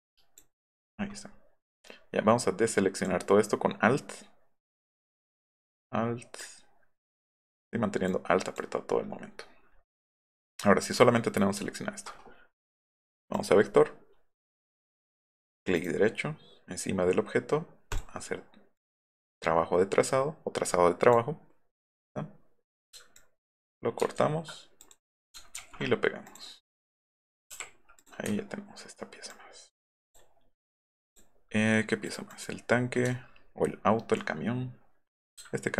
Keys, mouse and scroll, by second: 1.8-3.1 alt+drag, 6.4 alt+click, 6.7 alt+F8, 6.9 alt+F1, 8.1 alt+click, 13.3 click, 15.7 click, 17.9 click, 18.7 click, 23.3 ctrl+click, 24.0 ctrl+z, 25.6 ctrl+v, 26.2 click, 27.5 i, 28.0 click, 28.2 v, 29.3-29.8 drag, 30.1 click, 31.1 click, 32.0 click, 33.1-33.7 alt+scroll up 2.